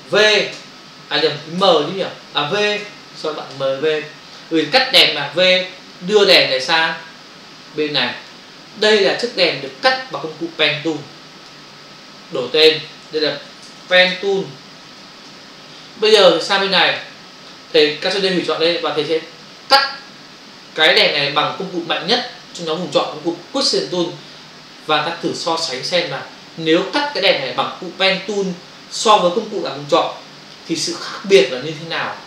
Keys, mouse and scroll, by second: 0.5 v, 6.0 click, 9.1 click, 10.8 click, 12.5 click, 12.6 click, 12.7 double click, 13.4 p, 14.8 typing, 15.2 Return, 16.9 click, 22.5 click.